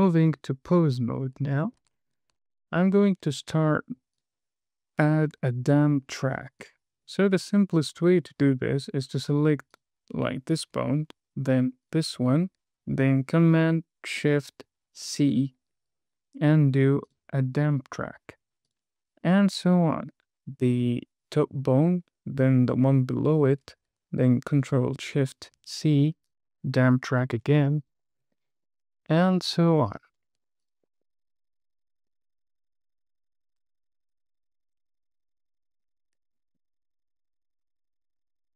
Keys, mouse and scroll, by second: 0.2 Tab, 1.7 shift+middle click, 2.3 scroll up 3, 2.8 shift+middle click, 4.5 click, 6.9 click, 10.1 click, 12.2 shift+click, 15.4 shift+super+c, 19.0 click, 19.6 shift+click, 25.9 shift+super+c, 27.4 click, 28.1 shift+click, 29.0 shift+super+c, 30.2 click, 30.9 shift+click, 31.1 shift+super+c, 31.4 shift+middle click, 31.6 super+z, 32.2 super+z, 32.5 click, 32.8 shift+super+c, 33.0 drag, 33.1 shift+click, 33.3 shift+super+c, 33.5 drag, 33.8 shift+super+c, 34.0 shift+middle click, 34.2 click, 34.5 shift+click, 34.7 shift+super+c, 35.1 shift+click, 35.3 shift+super+c, 35.7 shift+super+c, 36.1 shift+click, 36.2 shift+super+c, 36.4 shift+middle click, 36.6 drag, 36.9 shift+super+c, 37.1 click, 37.4 shift+super+c, 37.9 shift+super+c, 38.0 click, 38.2 shift+click, 38.4 shift+super+c.